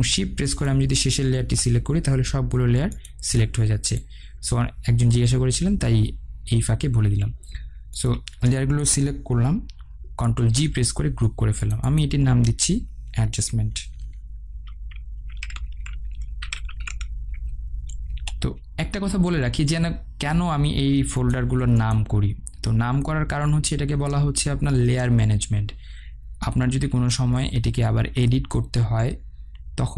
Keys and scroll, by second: 10.3 ctrl+g, 18.2 Return.